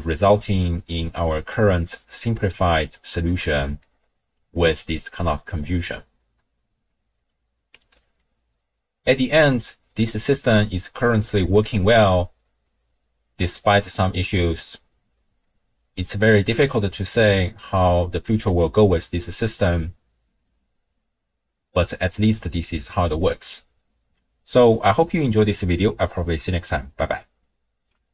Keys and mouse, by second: 3.3 middle click, 7.7 d, 8.2-11.0 drag, 11.2 d, 11.4 middle click, 11.4 d, 12.7-13.7 drag, 15.5-16.1 drag, 16.5 x, 17.2 click, 17.3 middle click, 18.2 click.